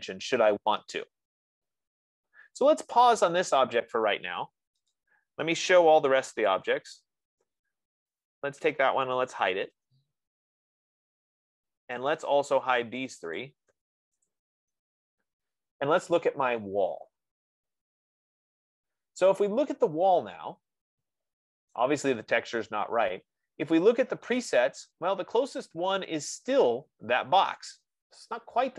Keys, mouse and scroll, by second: 1.1-1.6 scroll, 4.5 F15, 5.4 click, 6.3-7.1 typing, 8.5 click, 9.4-10.4 typing, 11.6 scroll, 12.7 click, 13.4 shift+click, 13.8 shift+click, 14.9 Return, 20.4-22.1 middle drag, 20.4 click, 22.1-24.0 right drag.